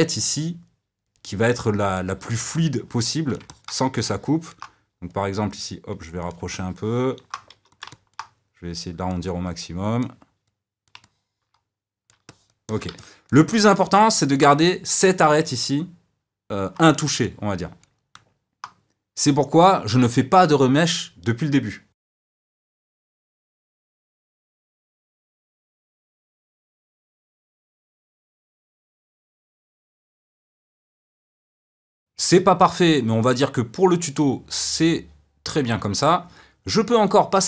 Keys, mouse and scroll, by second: 5.1-6.5 drag, 6.5 middle click, 7.5 f, 7.9 middle click, 8.4-11.0 drag, 11.0-21.9 middle drag, 21.9 f, 22.5-23.8 drag, 24.1 shift+middle click, 24.6 click, 24.7 middle click, 24.9 click, 25.3 middle click, 26.3 click, 26.6 middle click, 26.9 f, 27.0 click, 27.4-28.7 shift+middle drag, 28.5 f, 28.7 f, 28.9 click, 29.3 d, 29.4 middle click, 29.6 click, 30.2 middle click, 30.4 f, 30.6 click, 30.8 middle click, 30.9 f, 31.1 click, 31.6 shift+middle click, 32.0 click.